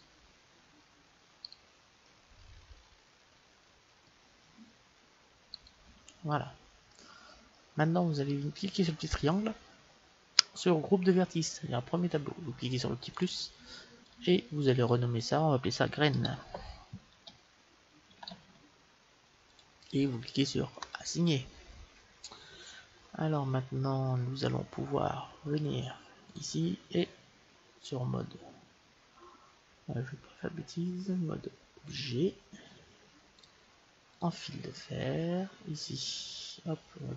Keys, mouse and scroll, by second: 2.5 middle click, 2.5 right click, 2.9 middle click, 2.9 right click, 3.3 middle click, 5.5-7.4 right drag, 6.9-8.6 middle drag, 9.0-10.7 drag, 13.2-16.7 drag, 20.8-22.7 drag, 22.5 middle click, 23.2-26.3 middle drag, 26.3-29.6 drag, 33.4-35.2 drag, 36.1-37.1 scroll down 1.